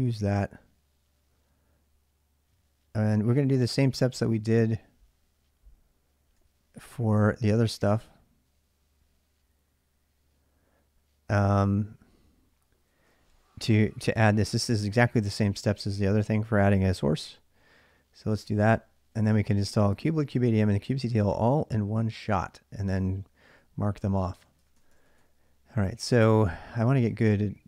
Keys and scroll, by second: 3.1 j, 3.4 j, 3.8 j, 4.1 j, 6.2 k, 6.5 k, 12.7-16.0 typing, 18.1 j, 18.5 j, 24.0-25.5 typing.